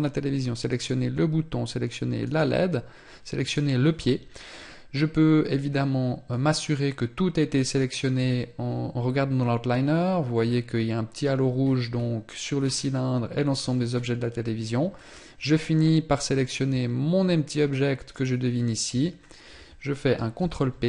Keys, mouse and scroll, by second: 0.0 shift+right click, 5.7 click, 11.0 scroll up 3, 11.9 scroll down 4, 12.9 scroll down 2, 13.9-14.3 scroll up 3, 14.3 scroll down 3, 17.5 shift+right click, 19.7 ctrl+p.